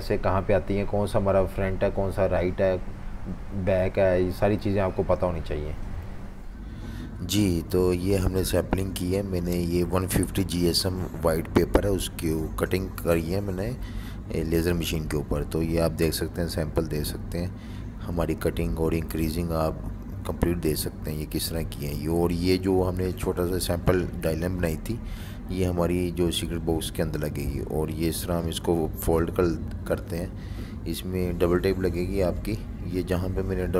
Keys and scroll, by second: 6.1 F19.